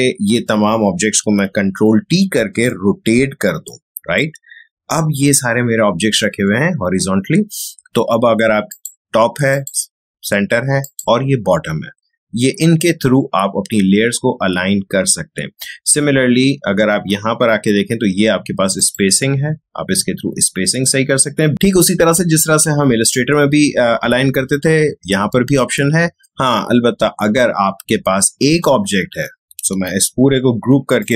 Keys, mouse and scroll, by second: 1.9 ctrl+t, 2.6-6.5 drag, 8.7 click, 18.7 click, 29.9 ctrl+g, 30.9-31.1 drag.